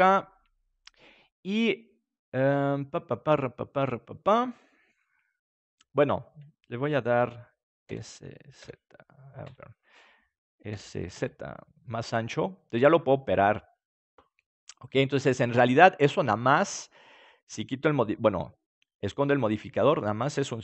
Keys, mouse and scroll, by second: 7.8 s, 10.7 s, 13.9-15.6 drag, 14.3-17.2 middle drag, 17.9-20.6 drag.